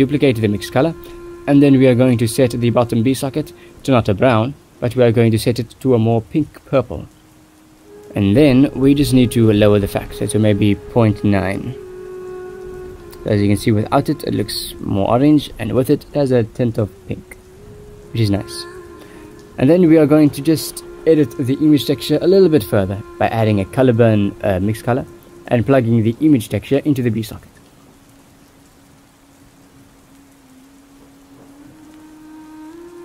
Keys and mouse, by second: 0.1 ctrl+s, 0.8 click, 1.8 click, 2.8 shift+d, 4.1 click, 5.6 click, 10.5-12.7 drag, 13.7-14.9 drag, 15.5 ctrl+s, 19.7 shift+d, 20.7 click, 22.3 click, 22.6 click, 24.9-28.3 drag, 28.7 ctrl+s, 30.3 click, 32.5 click.